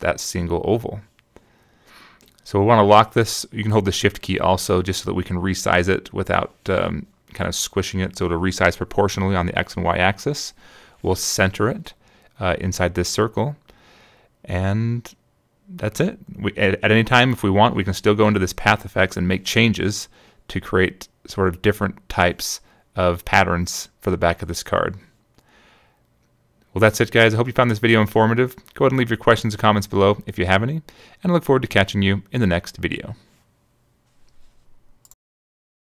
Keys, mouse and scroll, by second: 4.7-7.6 drag, 8.3 shift+click, 9.6 click, 10.7 click, 11.1 click, 12.5 click, 13.5 click, 18.3 click, 19.9 click, 20.3 click, 20.7 click, 21.3 click, 21.6 click, 21.9 click, 22.8 click, 23.4 click, 24.4 click, 25.6 click, 26.1 click, 27.9 click, 29.1 click, 31.1-34.2 shift+drag, 34.8 click.